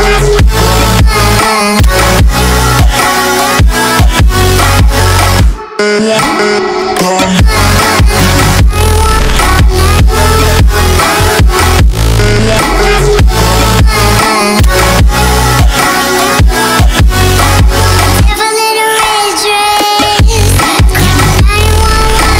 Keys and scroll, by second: 5.6 alt+w, 5.8 f, 7.0-9.7 typing, 7.0 Return, 8.0 Return, 8.6 Return, 10.9 1, 12.2 z, 13.1 Return, 14.5 Return, 15.8 0, 15.9 Return, 16.3 F3, 16.4 F4, 16.6 4, 18.2 0, 18.4 BackSpace, 18.5 0, 18.6 Return, 19.0 2, 20.9 0, 21.1 Return, 21.5 F4, 21.9 2.